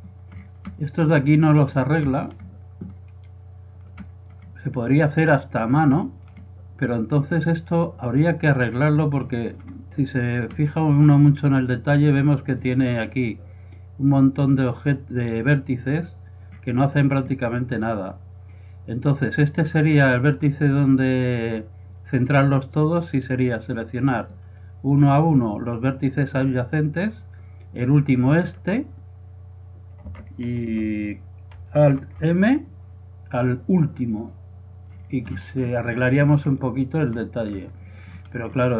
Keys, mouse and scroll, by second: 2.3 middle click, 3.0-4.3 middle drag, 6.9-8.3 middle drag, 9.3-19.6 middle drag, 19.6-21.4 right drag, 24.2-29.5 right drag, 32.0 alt+m, 35.2 middle click, 35.9-38.7 middle drag.